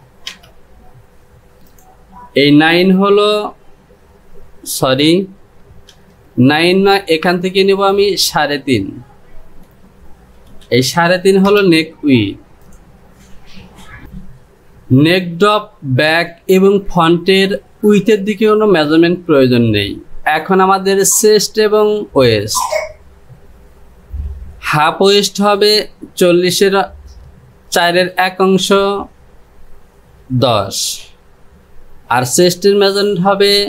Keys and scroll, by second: 1.1 Return, 2.6 Home, 8.9 Down.